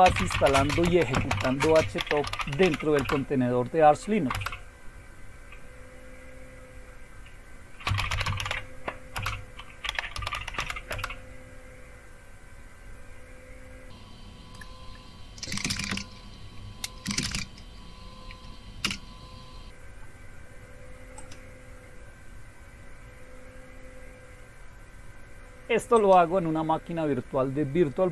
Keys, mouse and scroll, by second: 0.0-4.8 typing, 7.6-10.9 typing, 9.1 Return, 14.5 click, 15.4-17.8 typing, 18.8 Return, 21.1 click, 25.9 click.